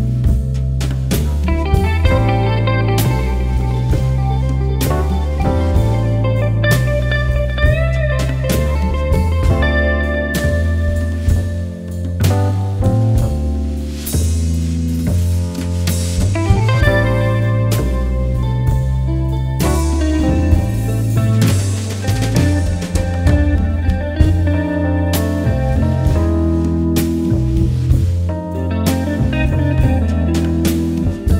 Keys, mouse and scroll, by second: 8.7-13.2 drag, 14.9 click, 16.2 ctrl+d, 16.6 alt+scroll down 1, 18.3 alt+scroll up 1, 21.8 alt+scroll up 1, 24.6 alt+scroll down 1, 25.1 click, 28.7 click.